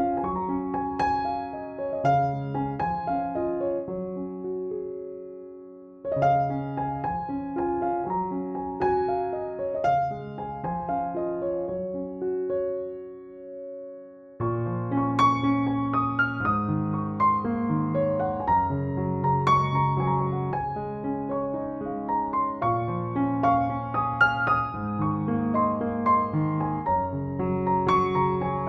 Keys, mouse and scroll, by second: 0.0 ctrl+=, 0.1 space, 0.3 click, 0.5-1.0 space, 1.3 click, 1.4-1.8 space, 2.2-3.8 scroll down 1, 6.5-8.3 drag, 20.8 ctrl+-, 23.8 ctrl+=.